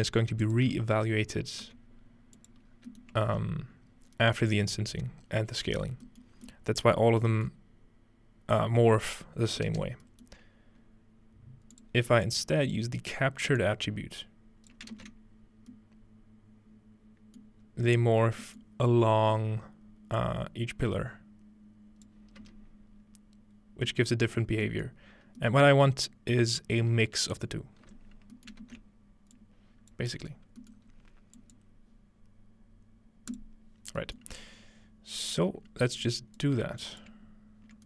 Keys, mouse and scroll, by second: 0.3 right click, 1.6 g, 2.4 click, 2.7-4.4 scroll down 1, 3.0 ctrl+middle click, 4.6-5.3 scroll up 1, 10.5-11.1 scroll down 2, 11.8-15.8 drag, 17.7-19.3 scroll up 2, 18.7-22.1 middle drag, 19.3 scroll up 1, 20.2-23.9 drag, 22.4 space, 24.5 middle click, 27.9 space, 28.5-30.1 ctrl+middle drag, 28.7 ctrl+space, 29.4 ctrl+click, 30.1 scroll down 2, 30.9 scroll up 2, 31.4 click, 33.3 click, 33.8-34.6 scroll down 2, 34.0 click, 34.2-36.0 middle drag, 34.6-35.2 scroll up 1, 36.0 click, 36.8 click.